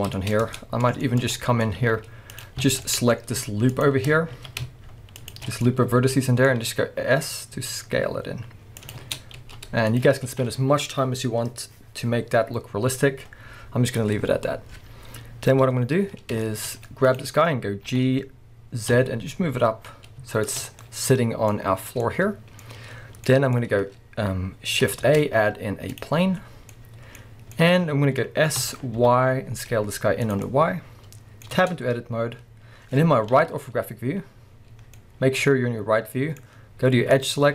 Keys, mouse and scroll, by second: 0.5 Tab, 1.3-1.6 scroll up 1, 1.8 z, 2.6 alt+a, 3.7 alt+shift+click, 4.3 alt+a, 5.2 alt+shift+click, 5.6-8.9 middle drag, 6.5-7.2 scroll up 2, 7.2 scroll down 2, 7.5 s, 8.9 click, 9.0 Tab, 9.4 z, 10.2 scroll down 2, 10.3 alt+a, 14.2-15.5 scroll down 1, 15.5 KP_1, 16.4-17.1 shift+middle drag, 16.8-17.1 scroll up 1, 17.1 click, 17.9 g, 20.5 shift+click, 20.7 scroll down 1, 20.8-30.3 middle drag, 21.8 scroll down 1, 22.7-23.3 scroll up 1, 23.6 scroll up 1, 25.0 shift+a, 26.3-26.7 scroll down 1, 27.2 scroll up 1, 28.6 s, 30.3 click, 30.4-37.1 middle drag, 31.5 Tab, 33.3 KP_3, 37.1 click.